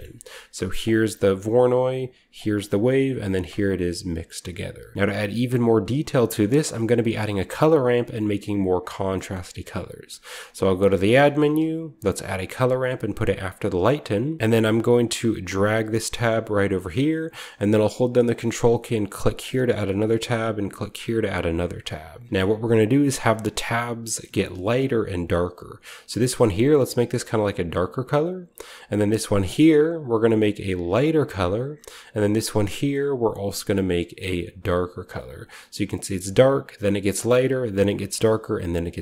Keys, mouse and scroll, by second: 0.9-2.3 ctrl+shift+drag, 2.4 ctrl+shift+click, 3.6-5.4 ctrl+shift+drag, 4.9-5.3 shift+scroll down 1, 5.3-6.0 shift+middle drag, 5.3-6.0 shift+scroll up 1, 5.4 typing, 6.0-6.9 scroll up 1, 6.2-8.7 middle drag, 6.6-8.7 drag, 9.3-10.1 middle drag, 10.0-11.4 typing, 10.4 click, 12.2 click, 13.3 click, 13.7 click, 13.9-17.1 scroll up 1, 14.4 click, 14.7 middle click, 15.5-17.1 drag, 19.1 ctrl+click, 20.9 ctrl+click, 21.1 click, 21.7 click, 25.4 click, 26.1 click, 26.8-28.0 drag, 29.0 click, 29.6 click, 30.5 click, 32.6 click, 33.2 click, 34.4 click, 36.1 click, 36.9 click, 37.7 click, 38.6 click.